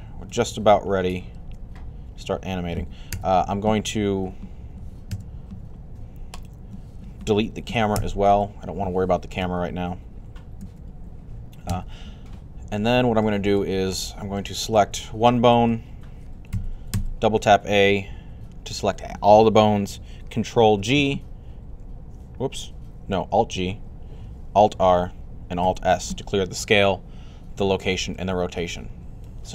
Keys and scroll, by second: 2.9 typing, 4.9 typing, 7.5-8.3 typing, 16.3-16.7 typing, 20.5 ctrl+g, 23.3 alt+g, 24.5 alt+r, 25.4 s.